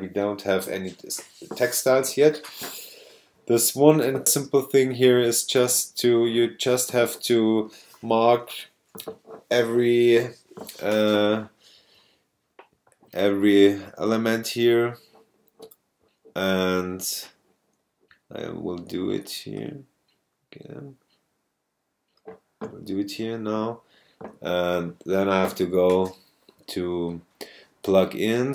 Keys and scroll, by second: 4.4 super+space, 5.1 space.